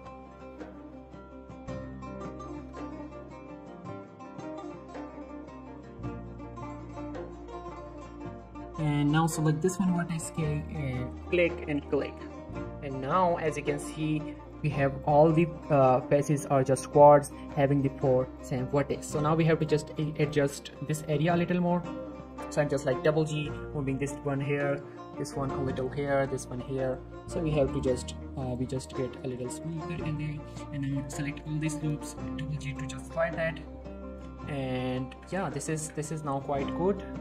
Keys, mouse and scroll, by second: 2.2 click, 2.8 middle click, 3.2 click, 3.5 k, 4.0 click, 5.7 click, 5.9 k, 6.1 click, 7.0 right click, 7.1-7.6 scroll down 1, 8.3 middle click, 8.8 click, 9.0 middle click, 9.9 k, 10.6 click, 14.6 middle click, 14.9 click, 21.0 middle click, 21.3 click, 21.5 middle click, 22.1-22.5 scroll up 1, 22.5 g, 22.6 g, 23.5 click, 23.7 middle click, 24.2 click, 24.8 g, 25.0 g, 25.8 click, 26.2 g, 26.3 g, 26.6 click, 27.2 g, 27.4 g, 27.7 click, 27.8 scroll down 1, 27.9 middle click, 28.5 click, 29.0 shift+middle click, 29.1 scroll up 1, 29.5 alt+shift+click, 29.7 shift+middle click, 30.2 g, 30.3 g, 30.9 right click, 31.3 middle click, 31.6 g, 31.7 g, 32.6 click, 33.9-34.8 scroll up 3, 34.1 z, 34.3 shift+middle click, 34.8 z, 35.1 Tab, 35.2 scroll down 1, 35.3 middle click, 35.8 Tab, 36.0 scroll down 1, 36.0 middle click, 36.4 click, 36.5 scroll down 1, 36.9 middle click.